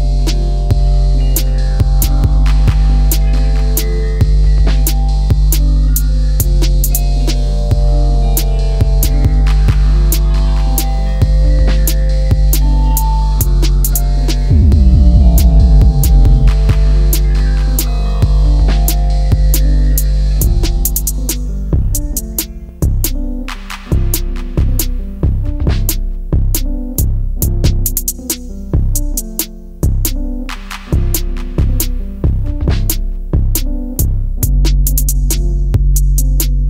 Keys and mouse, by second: 5.1 click, 8.3 Delete, 13.0-14.2 right drag, 15.3 s, 17.1 click, 17.6 s, 17.9 x, 19.5 ctrl+z, 19.9 ctrl+z, 22.4-23.6 middle drag, 24.2 middle click, 25.4 click, 27.0 middle click, 28.2 ctrl+z, 28.9 middle click, 31.0 middle click, 32.7 middle click, 35.6 middle click.